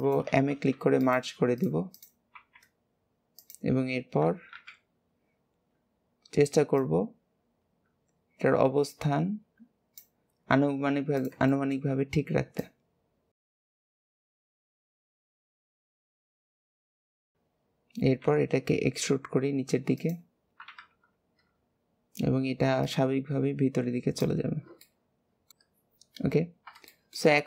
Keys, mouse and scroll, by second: 1.5 click, 1.9 click, 5.6-6.7 scroll up 1, 6.7 click, 10.3 scroll down 1, 11.1 click, 11.4-12.5 shift+middle drag, 12.5 click, 14.1 click, 14.4 ctrl+KP_1, 15.3 middle click, 15.8 KP_1, 16.7 shift+middle click, 16.9-18.1 scroll up 3, 17.1 shift+middle click, 18.1 e, 20.7 KP_1, 22.8 click, 24.4-24.8 scroll down 2, 24.8 middle click, 25.5-25.8 scroll down 2, 26.8 shift+middle click, 27.2-27.4 scroll up 3.